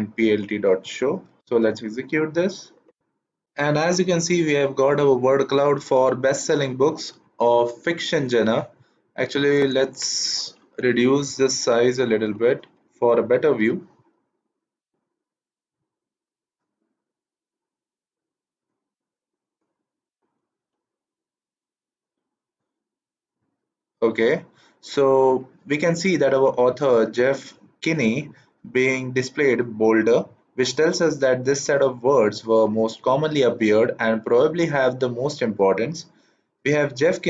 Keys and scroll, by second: 1.4 shift+Return, 10.7 BackSpace, 11.5 KP_4, 11.9 Right, 12.1 Right, 12.3 Right, 12.6 BackSpace, 13.1 KP_4, 13.5 shift+Return.